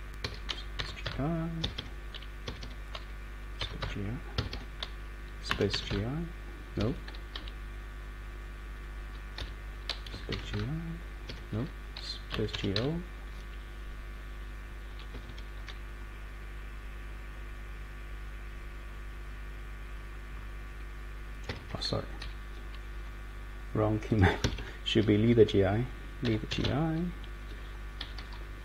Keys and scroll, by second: 0.2 Escape, 0.7 g, 1.0 i, 1.6 Escape, 1.7 Escape, 2.4 Escape, 2.6 Escape, 3.3-6.4 typing, 4.4 Escape, 6.8 Escape, 7.3 Down, 7.9-8.8 Down, 9.4 Left, 10.1-11.0 typing, 11.3 Escape, 12.3-13.2 typing, 15.1 Escape, 15.3 Escape, 21.5 Escape, 21.6 Escape, 22.2 Page_Down, 24.4 Escape, 24.5 Escape, 26.0-27.1 typing, 28.0 Down, 28.1 Down, 28.3 Down, 28.5 Down.